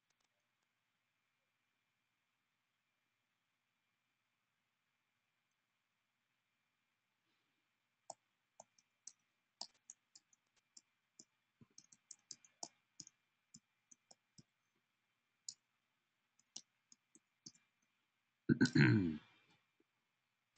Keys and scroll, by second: 8.1-9.9 typing, 11.5 typing, 13.3-14.0 typing, 15.2 Tab.